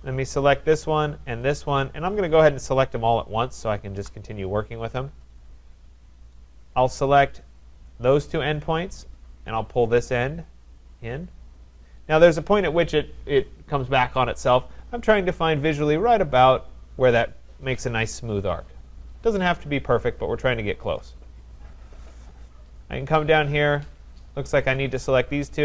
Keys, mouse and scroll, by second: 0.4 click, 1.5 shift+click, 1.8 scroll, 2.8 click, 3.7 click, 5.9 scroll, 6.7 scroll, 7.9 click, 20.9 click, 21.5-22.0 scroll, 22.6-22.9 scroll, 23.9 click, 24.7 click.